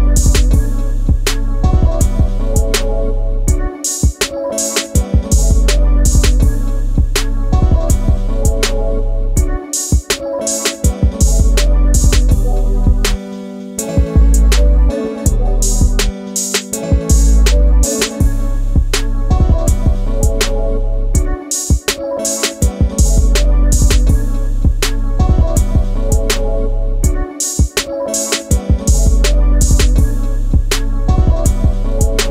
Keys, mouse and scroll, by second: 0.9 click, 1.0 g, 2.1 shift+middle click, 2.4 scroll up 5, 3.1 click, 3.3 g, 4.7 shift+middle click, 5.5 click, 5.8 g, 7.0 scroll down 5, 7.4 shift+middle click, 7.7-8.2 scroll up 5, 8.2 click, 8.4 g, 10.1 click, 10.3 g, 11.4 shift+middle click, 12.0 g, 13.4 click, 13.6 g, 15.8 click, 16.0 g, 17.2-17.5 scroll down 2, 17.8 z, 17.8 z, 18.6 z, 18.9 scroll down 2, 19.2 Tab, 19.6 click, 19.9-20.3 scroll down 4, 20.3 scroll up 2, 20.9 shift+middle click, 21.8 click, 22.1 shift+middle click, 22.5 click, 22.6 scroll up 2, 23.1 click, 23.3 Tab, 23.4-23.8 scroll up 1, 23.8 shift+middle click, 24.2 z, 25.2 click, 25.5 g, 27.4 z, 27.7 Tab, 27.7 scroll down 1, 28.3-29.0 scroll down 4, 29.0-32.0 shift+middle drag, 32.0 click.